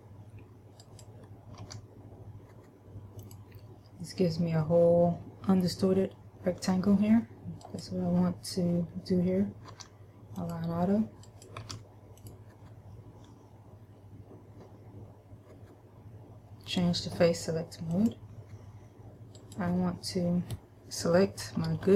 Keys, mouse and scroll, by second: 1.0 right click, 1.9 w, 7.8 right click, 10.0 w, 11.5 right click, 11.9 w, 18.0 click, 19.5 right click, 21.5 KP_Add.